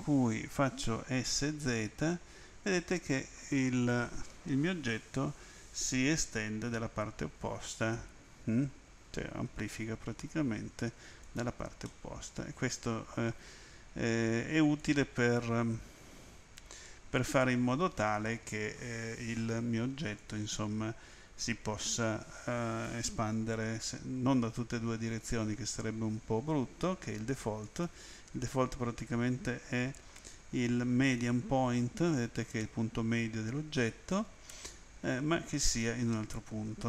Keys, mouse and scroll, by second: 1.0-2.1 typing, 11.2 click, 11.8 middle click, 14.8 click, 20.2 click, 27.6 click, 31.0 click.